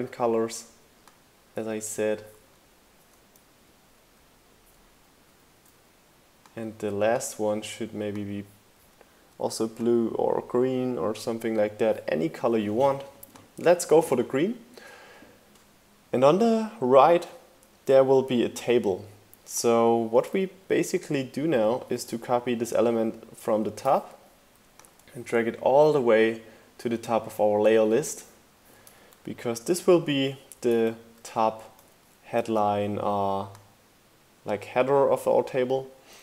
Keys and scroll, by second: 2.4 shift+Down, 4.9 shift+Down, 21.8 super+v, 22.3 shift+Down, 22.5 shift+Right, 23.1 shift+Right, 23.2 shift+Down, 23.3 shift+Right, 28.9 shift+Left, 31.0 Left.